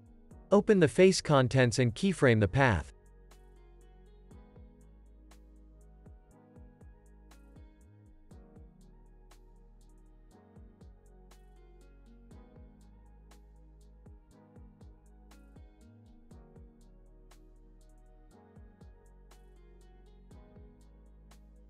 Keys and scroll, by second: 4.6 u, 15.3 u, 19.3 x.